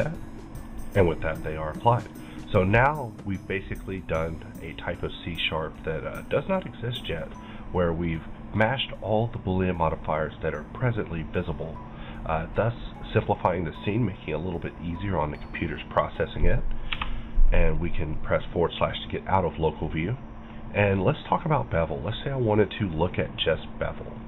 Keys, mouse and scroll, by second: 2.7-5.7 middle drag, 5.4-5.7 scroll down 1, 5.7-9.9 middle drag, 7.0-9.0 scroll up 1, 13.1-16.0 middle drag, 13.1 scroll up 1, 15.5-16.9 scroll up 3, 17.8-18.1 scroll down 1, 18.1-22.0 middle drag, 21.4 click, 22.0 right click, 22.9-24.2 drag.